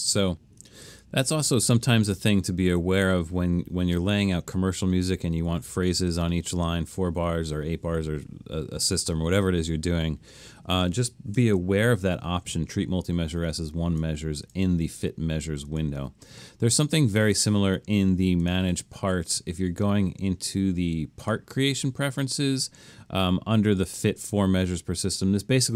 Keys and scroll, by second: 0.9 super+z, 11.4 shift+super+m.